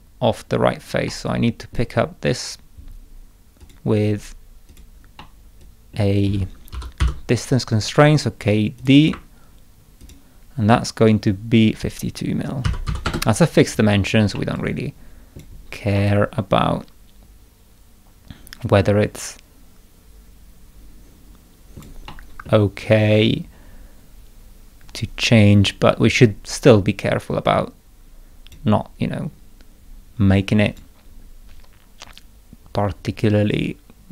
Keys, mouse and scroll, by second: 1.0 middle click, 1.2 click, 3.6 click, 4.7 click, 5.2 middle click, 5.6 click, 6.7 k, 7.0 d, 8.7 click, 10.0 ctrl+click, 14.3-15.3 middle drag, 14.5 click, 15.9-21.7 middle drag, 16.0-21.8 drag, 22.1 middle click, 27.0-28.5 drag, 30.6 click.